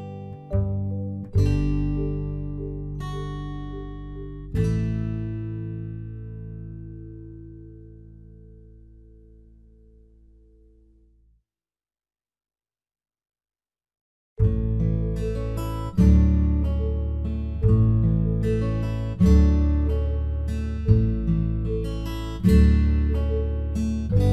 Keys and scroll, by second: 15.6 ctrl+v.